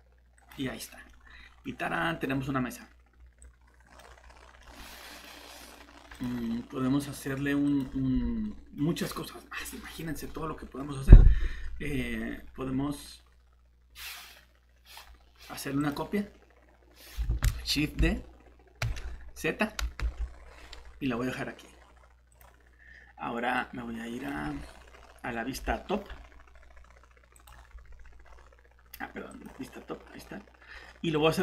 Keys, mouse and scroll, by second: 0.4 click, 1.1 middle click, 1.7 scroll up 1, 1.9 middle click, 3.4 click, 4.2 scroll down 1, 4.6 middle click, 5.2 scroll up 1, 5.4 scroll down 1, 5.5-5.9 scroll up 1, 6.1 click, 6.4 middle click, 7.2 scroll up 1, 7.7 click, 8.4 middle click, 15.8 click, 17.3 Escape, 18.6-18.9 typing, 20.1 z, 24.5 scroll down 1, 27.3 click, 28.2 scroll down 1, 29.3 click, 30.0 scroll down 1.